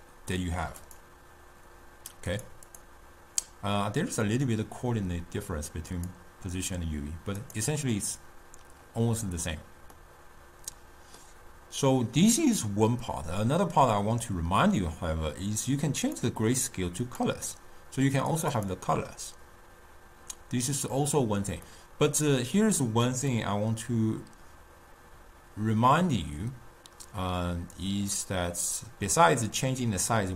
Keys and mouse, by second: 6.2-7.8 drag, 10.4-13.4 middle drag, 16.1-18.8 drag, 21.9-23.4 middle drag, 23.4-26.7 drag.